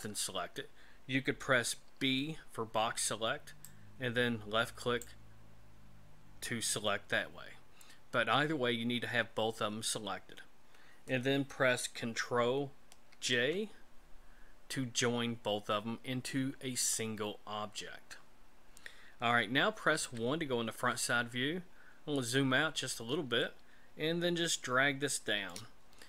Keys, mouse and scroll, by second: 1.9 b, 13.1 ctrl+j, 20.0 KP_1, 21.7-22.4 scroll down 5, 22.7-23.1 scroll down 2, 23.4 shift+middle click.